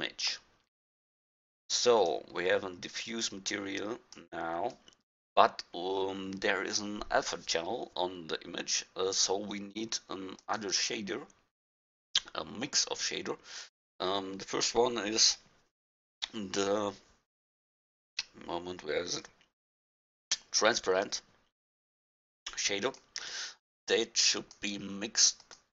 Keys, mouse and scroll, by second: 0.5-1.0 middle drag, 1.5-2.2 drag, 4.9-6.5 drag, 10.4-12.9 drag, 22.7 click, 23.0 click, 24.4-25.7 drag.